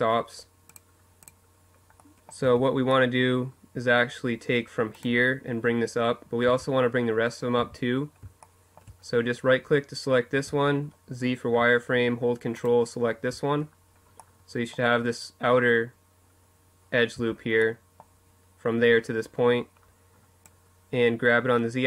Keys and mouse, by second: 1.1 Tab, 2.4-3.6 middle drag, 3.6-5.2 right drag, 5.2 z, 6.3 z, 6.7-9.1 middle drag, 9.1 z, 9.9-11.5 middle drag, 13.1-14.8 middle drag, 15.8 z, 16.4-18.1 middle drag, 18.3 middle click, 19.2-21.8 drag.